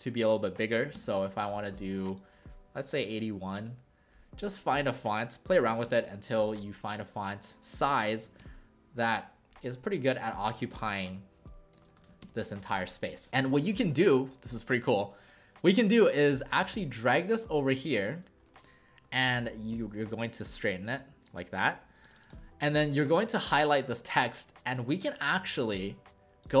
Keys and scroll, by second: 0.5-1.3 typing, 3.2-3.9 typing, 5.4-6.2 typing, 8.0-8.7 typing, 9.1 Return, 10.7-12.5 typing, 22.3 ctrl+shift+a.